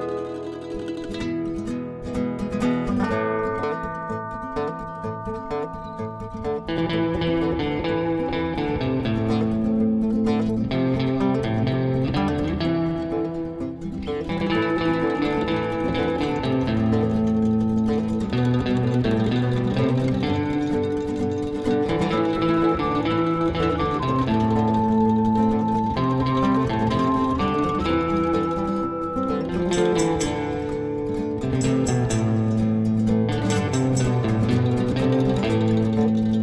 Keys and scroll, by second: 1.6 typing, 6.8 b, 10.4 typing, 13.0-13.7 typing, 16.9 b.